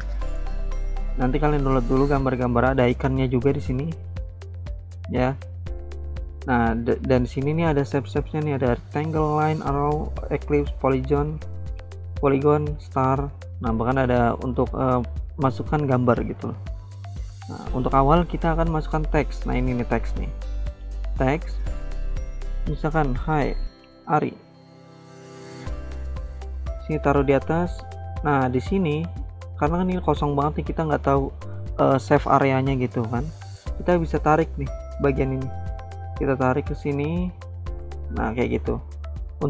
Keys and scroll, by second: 5.3 alt+Tab, 22.7-24.7 typing, 28.3-29.1 typing.